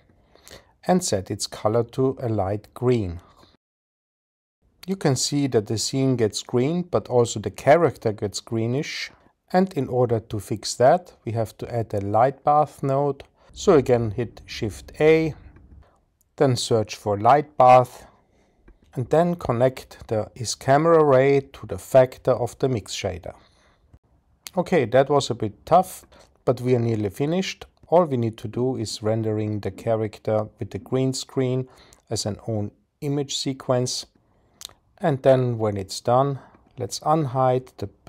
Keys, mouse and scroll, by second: 2.7 click, 6.4 click, 15.8 shift+a, 20.8-22.3 drag, 30.0 click, 30.6 click.